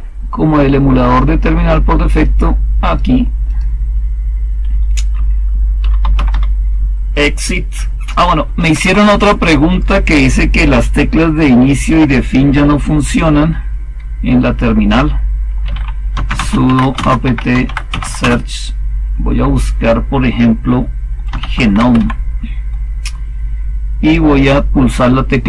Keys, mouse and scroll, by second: 5.5-6.7 typing, 8.3-9.1 typing, 15.3-18.4 typing, 20.9-22.4 typing, 25.2 Home.